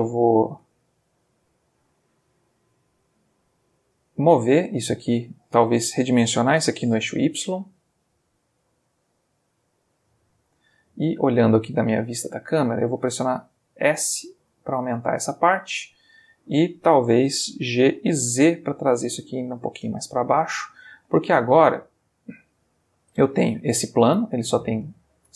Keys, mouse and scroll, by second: 0.1-1.4 middle drag, 1.7-2.4 ctrl+middle drag, 2.6 ctrl+Tab, 3.5 click, 4.5-5.5 middle drag, 5.7 a, 6.5 s, 6.8 y, 10.2 click, 11.2 click, 12.2 click, 13.0 s, 14.8 click, 16.1 ctrl+Tab, 17.7 g, 18.2 z, 19.5 click, 20.0-22.0 ctrl+middle drag, 22.0 ctrl+middle click, 22.8-24.8 ctrl+middle drag, 24.8 Tab.